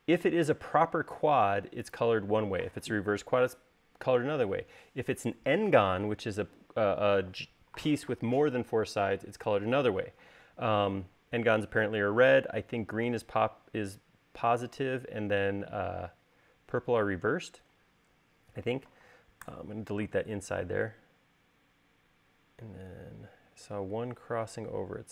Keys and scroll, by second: 1.1 space, 20.1 BackSpace.